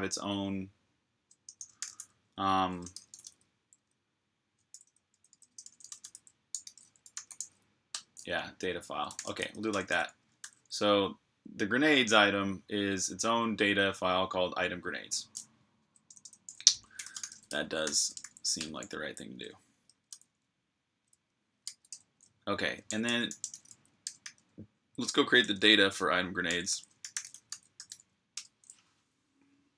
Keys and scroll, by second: 1.4-3.4 typing, 4.5-9.5 typing, 10.2 super+h, 15.9-18.0 typing, 19.9 super+h, 21.4 v, 21.7 Return, 22.4-24.4 typing, 26.3-28.2 typing.